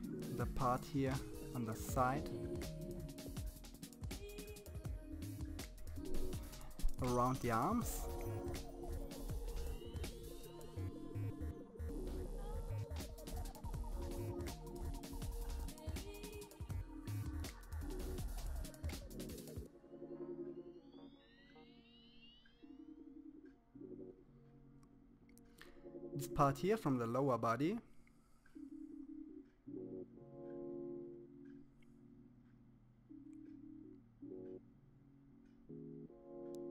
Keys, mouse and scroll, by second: 0.5 click, 1.7 click, 2.8 click, 3.4 middle click, 3.7 scroll up 2, 3.7 middle click, 4.0 click, 5.1 middle click, 6.9 click, 8.9 middle click, 9.3 click, 9.9 middle click, 10.2 click, 10.8 middle click, 11.0 KP_1, 11.1-11.4 scroll up 1, 11.4 click, 12.7 middle click, 13.6 middle click, 13.9 scroll down 2, 14.0 middle click, 14.6-15.2 scroll up 4, 14.8 shift+middle click, 15.6 click, 16.8 click, 17.1 middle click, 17.6 click, 18.1 click, 18.5 middle click, 18.9 click, 19.8 click, 20.4 middle click, 20.9 click, 21.5 middle click, 21.7 KP_1, 21.8 scroll down 7, 21.9 middle click, 22.2 KP_1, 22.3 shift+middle click, 22.5 scroll up 3, 22.6 shift+middle click, 22.9 click, 25.5 scroll down 2, 25.7 KP_3, 25.8 scroll up 3, 25.9 f, 26.3 click, 26.8 click, 28.0 click, 28.6 KP_1, 29.0 click, 31.0 click, 31.3 middle click, 31.6 shift+middle click, 31.6 scroll up 1, 31.9 click, 33.5 click, 34.2 click, 34.6 f, 35.2 click, 36.4 middle click.